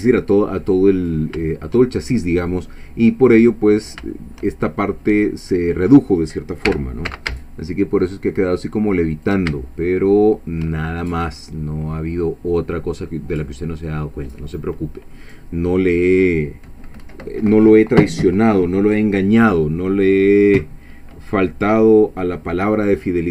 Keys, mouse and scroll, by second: 0.7 scroll up 2, 1.2 scroll down 2, 1.6-3.5 shift+middle drag, 3.6 scroll up 1, 4.1 shift+middle click, 6.7 g, 7.1 z, 9.1 shift+click, 9.6-10.8 shift+middle drag, 10.9 shift+scroll down 1, 11.2-12.5 middle drag, 12.6-12.9 scroll down 1, 13.1 middle click, 14.2 scroll down 1, 14.6 middle click, 15.6-15.9 scroll up 1.